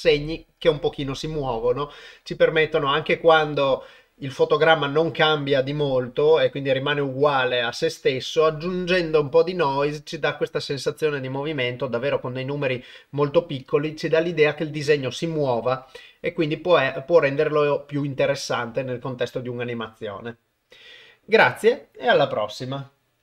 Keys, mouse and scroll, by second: 11.4-12.7 drag.